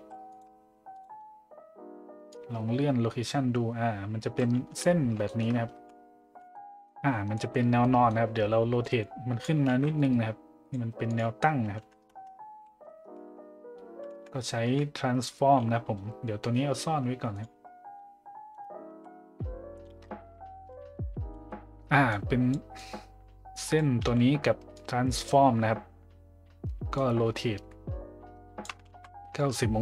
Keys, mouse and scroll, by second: 2.4-4.4 drag, 5.2 shift+middle drag, 6.2 `, 6.5-6.8 middle drag, 7.3 middle click, 7.8 middle drag, 8.8 click, 9.7 ctrl+z, 10.0 click, 11.1-12.5 drag, 14.6 `, 21.4 middle click, 22.1-22.6 drag, 22.8 click, 24.7-25.3 drag, 26.9-29.3 drag, 28.9 ctrl+z.